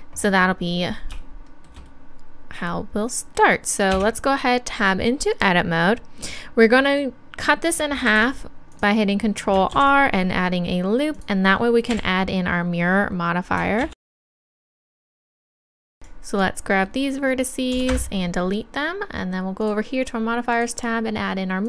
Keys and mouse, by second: 3.9 Tab, 8.1 ctrl+r, 8.8-10.6 drag, 13.9 KP_1, 14.1 a, 15.0 z, 15.7 b, 17.7 x, 19.6-21.6 drag.